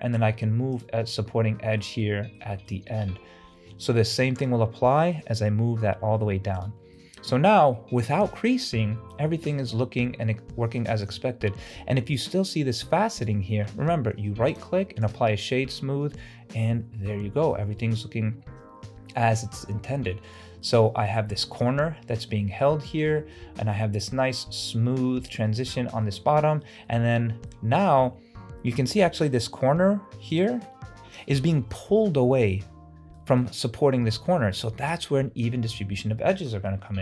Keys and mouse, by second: 1.6 shift+middle click, 2.1 middle click, 2.6 shift+middle click, 4.1 ctrl+r, 7.0 click, 7.3 Tab, 7.8-8.3 drag, 8.6 click, 9.3 ctrl+alt+z, 10.3-10.8 middle drag, 11.0 shift+middle drag, 13.2 click, 14.7 click, 15.6-17.1 middle drag, 17.6-18.0 middle drag, 20.7 shift+middle drag, 21.3 ctrl+alt+z, 23.2 shift+middle drag, 26.1-26.6 middle drag, 26.9-27.5 middle drag, 27.8 shift+drag, 29.3 middle click, 29.7 Tab, 30.4 alt+click, 31.3 middle click, 31.7 Tab, 33.2 middle drag, 34.3-34.9 middle drag, 35.7 Tab, 36.5 middle click.